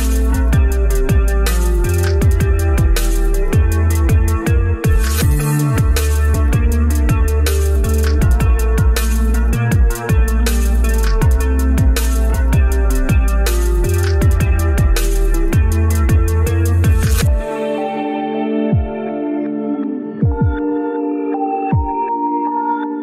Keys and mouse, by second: 4.6-5.8 middle drag, 6.6-7.3 middle drag, 7.5 shift+d.